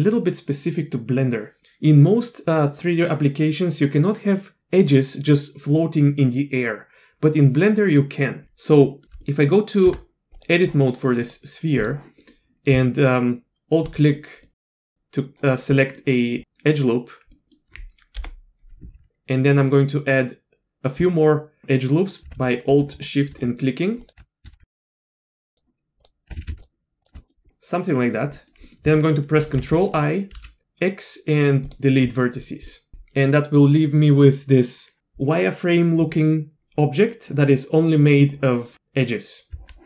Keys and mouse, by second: 8.4 click, 8.9 middle click, 9.2 middle click, 9.8 Tab, 11.3-11.8 drag, 12.2 middle click, 13.8 alt+click, 14.5 alt+middle click, 14.7-15.1 alt+drag, 15.2-15.5 drag, 15.7 drag, 17.3 drag, 18.2 KP_7, 22.9 ctrl+alt+z, 23.0 alt+click, 23.5 alt+shift+click, 24.5 ctrl+z, 25.0 alt+shift+click, 26.0 alt+shift+click, 26.5 ctrl+alt+shift+z, 27.2 click, 27.5 click, 28.3 click, 28.6 click, 29.4 ctrl+i, 30.0 click, 30.3 x, 32.1 drag, 32.7 click, 36.8 click, 39.5 Tab.